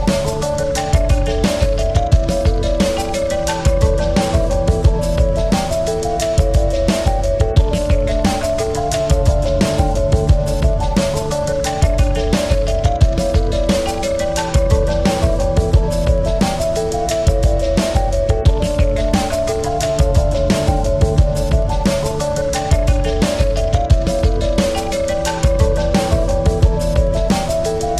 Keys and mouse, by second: 0.3 click, 0.3 typing, 2.2 click, 2.2 typing, 3.5 click, 3.5 typing, 6.0 right click, 9.0 click, 10.2 click, 11.1-11.9 typing, 11.9 click, 15.3 click, 15.3 typing, 17.0 click, 17.0 typing, 18.9 click, 18.9 typing, 21.6 click, 21.6 typing, 22.9 click, 22.9 typing, 24.0 click, 24.0 typing, 27.4 click, 27.4 typing.